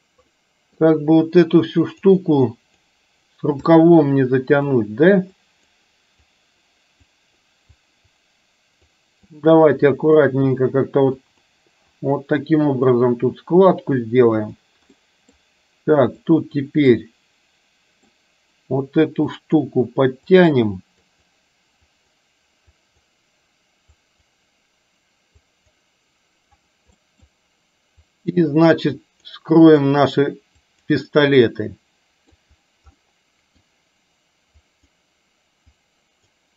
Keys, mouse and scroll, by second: 0.3 middle click, 1.6 click, 2.5 click, 3.7-4.7 middle drag, 5.3 click, 6.3 click, 7.2 click, 7.7 click, 9.0 click, 10.0 click, 11.3 click, 12.0 click, 12.7 click, 13.8 click, 14.5 click, 15.0 middle click, 16.2 click, 17.0-18.2 middle drag, 19.3 click, 20.3 click, 21.1 click, 22.0 click, 22.8 click, 24.1 click, 25.5 click, 27.1 middle click, 28.1 click, 29.0 click, 29.6 click, 30.7 click, 31.5 middle click, 33.1 middle click, 34.7 click, 35.8 click.